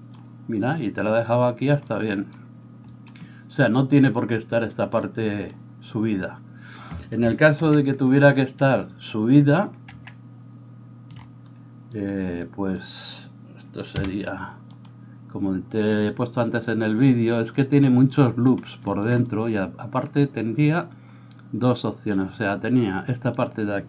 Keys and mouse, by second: 7.7 ctrl+z, 9.9 ctrl+z, 14.0 h, 23.4-23.8 middle drag, 23.4-23.8 right drag.